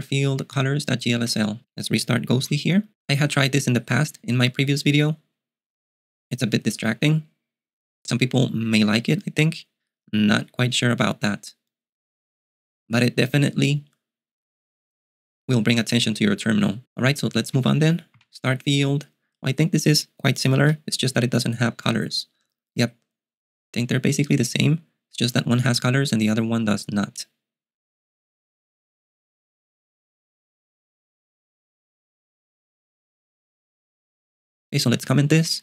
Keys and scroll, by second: 1.2 ., 2.6 super+q, 17.2-18.7 typing, 20.9 super+q, 35.0 ., 35.4 j.